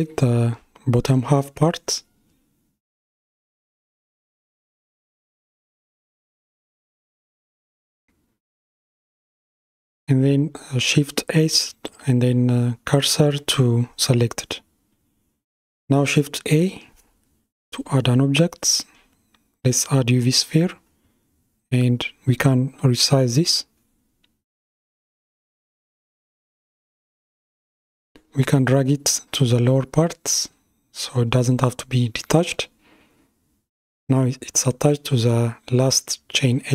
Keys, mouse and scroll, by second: 2.0 KP_1, 3.7 shift+KP_1, 5.4 KP_3, 8.1-8.4 scroll down 4, 9.7 click, 11.9 shift+s, 17.6 shift+a, 20.3 scroll down 3, 22.1 s, 26.6 g, 35.3 Tab.